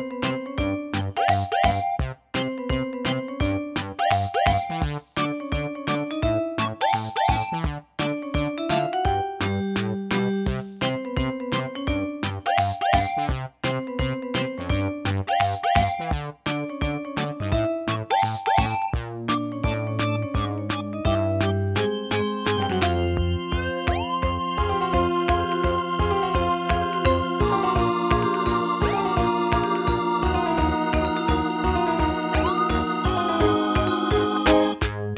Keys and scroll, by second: 17.5 Tab, 17.7 Tab, 17.9 Tab.